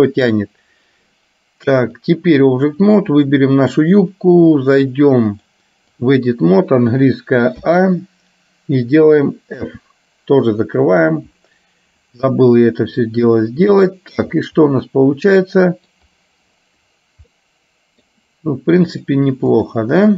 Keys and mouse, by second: 2.0 click, 3.2 click, 5.5 click, 9.7 f, 13.8 shift+middle click, 14.7-16.0 middle drag, 17.5 middle click, 19.2 click.